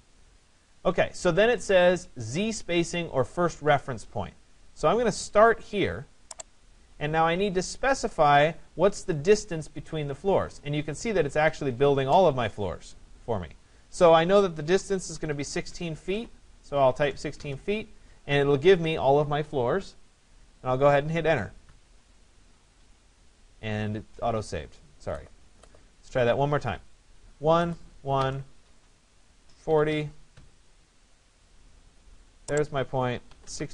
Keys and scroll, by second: 14.2 1, 14.8 6, 21.3 Return, 27.5 Return, 29.9 0, 33.3 1, 33.5 6.